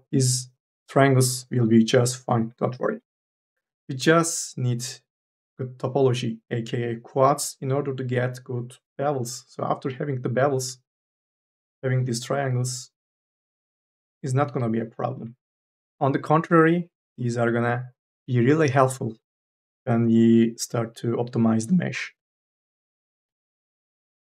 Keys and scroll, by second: 0.0 3, 11.4 3, 24.1 ctrl+z.